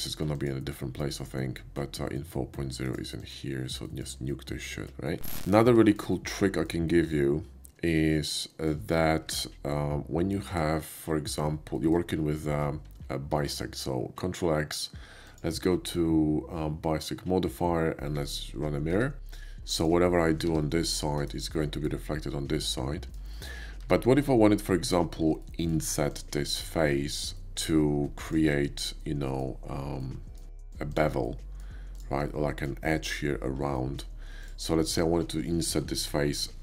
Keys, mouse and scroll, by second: 0.4 click, 2.7 shift+click, 3.2 shift+click, 3.8 shift+middle drag, 5.9 shift+middle click, 6.1-6.6 shift+middle drag, 6.9 shift+middle drag, 8.2-8.7 shift+middle drag, 9.3 shift+a, 10.3 click, 10.9 middle drag, 11.7 middle click, 13.4 alt+x, 15.3 click, 18.2 click, 19.0 Tab, 19.3 Tab, 19.8 click, 20.3 g, 21.2 right click, 21.5 middle click, 22.5 middle click, 23.4 shift+middle click, 23.6 middle click, 23.9 Tab, 24.4 middle click, 25.4 shift+middle click, 26.0 shift+click, 27.2 shift+middle click, 28.2 shift+click, 28.9 shift+middle click, 29.9 shift+middle click, 30.6 click, 30.9 click, 31.2 shift+middle click, 31.9 shift+click, 32.3 shift+middle click, 33.7 shift+middle click, 34.4 shift+click, 34.8 shift+middle click, 35.4 middle click, 36.4 i.